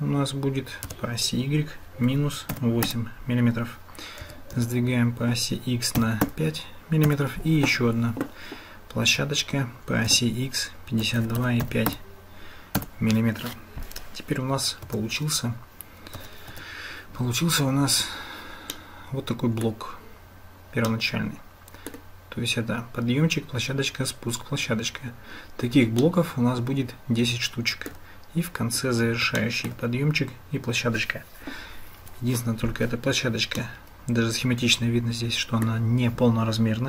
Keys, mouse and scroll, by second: 4.2 g, 16.2 Tab, 18.7 click, 21.1 click, 26.2-27.9 shift+drag, 29.5 shift+click, 33.6-35.7 drag.